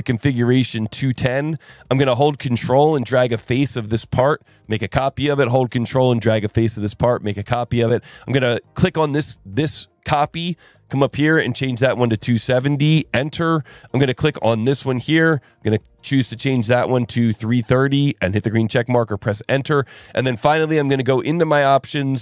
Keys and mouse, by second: 0.6 click, 3.7 ctrl+click, 6.9 ctrl+click, 8.8 click, 11.0 click, 11.7 click, 12.6 KP_Enter, 13.9 click, 14.5 click, 15.6 click, 16.5 click, 17.3 click, 18.3 click, 19.0 click, 20.9 click.